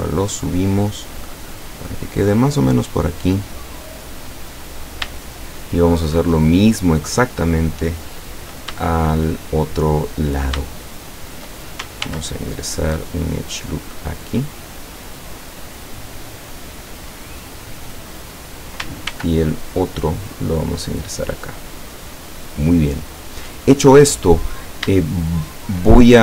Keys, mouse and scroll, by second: 4.4 click, 5.3-7.4 shift+middle drag, 8.8-10.3 shift+middle drag, 10.7-11.7 shift+middle drag, 12.1 ctrl+r, 13.3 click, 18.4 click, 19.2 ctrl+r, 20.1 click, 23.2 click, 24.3-24.6 scroll down 1, 25.1-26.0 shift+middle drag.